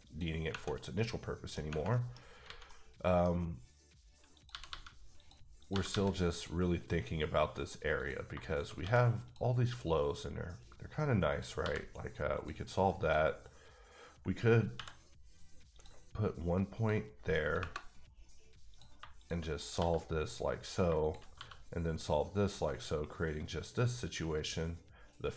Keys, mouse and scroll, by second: 0.0 click, 0.5 Tab, 0.7 scroll down 1, 0.9 middle click, 1.9 middle click, 2.1 scroll up 1, 2.4 alt+a, 2.6 middle click, 4.3 click, 4.5 g, 4.6 g, 5.1 click, 5.6 click, 5.7 g, 5.9 g, 6.3 click, 7.9 click, 8.3 shift+click, 8.8 x, 9.2 click, 11.3 click, 11.6 f, 12.3 click, 13.0 click, 14.7 k, 15.7 click, 16.7 click, 17.5 KP_Enter, 18.7 click, 18.9 shift+click, 19.4 click, 19.8 f, 20.6 click, 20.8 shift+click, 21.2 click, 21.3 f.